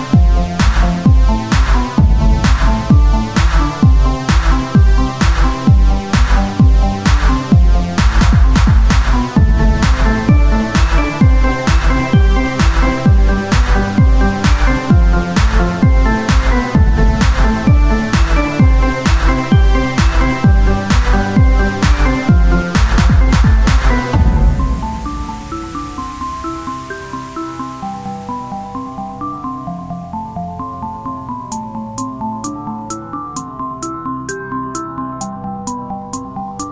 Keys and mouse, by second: 0.5-3.4 drag, 0.5-2.0 right drag, 3.4 Tab, 4.6-5.8 drag, 4.8 z, 6.2-7.4 drag, 8.0 Tab, 8.2-10.1 drag, 10.1 KP_1, 10.4 z, 12.2 e, 13.9-17.9 drag, 15.9 z, 18.9-20.0 drag, 20.0-22.2 right drag, 22.2 ctrl+r, 24.2 KP_1, 24.5 z, 26.0 g, 26.9 click, 27.1 z, 27.6 click, 28.2-30.4 drag, 28.4 right click, 30.4-32.9 right drag, 31.1 click, 33.0 click, 33.2-34.4 right drag, 33.5 Tab, 34.4 KP_1, 34.9 z, 36.0-36.7 drag, 36.0-36.7 right drag, 36.1 Tab.